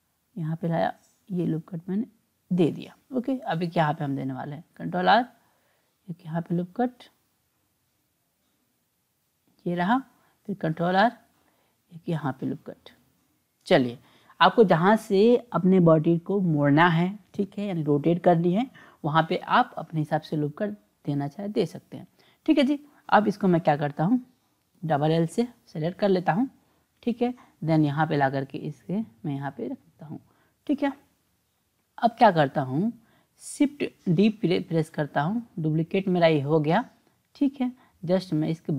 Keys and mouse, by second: 4.7 ctrl+r, 10.5 ctrl+r, 20.0 click, 22.9 click, 24.8 l, 24.9 l, 26.8-29.8 drag, 34.1 shift+d, 37.4-38.7 drag.